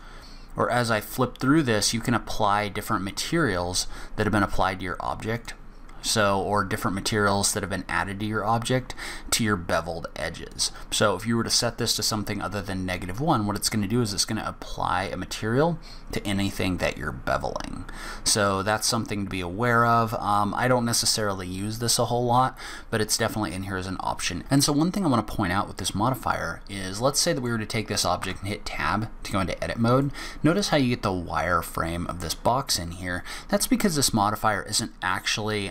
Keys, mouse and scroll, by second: 0.9 click, 1.8 click, 3.2 click, 5.3 click, 10.5 click, 14.7 click, 25.8 scroll down 1, 26.2 click, 26.7 middle click, 28.2 Tab, 29.5-29.8 scroll up 2, 29.9 middle click, 32.7 scroll down 2, 33.1 scroll up 1.